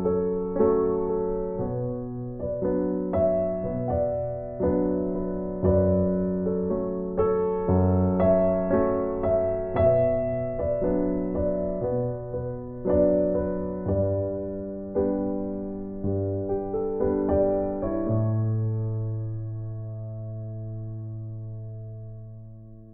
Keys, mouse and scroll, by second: 1.4 scroll down 1, 1.6 right click, 2.2-3.1 scroll up 1, 3.3 click, 8.2 right click, 9.0 scroll up 1, 10.1 click, 17.5 scroll down 1, 17.8 right click, 19.2 click.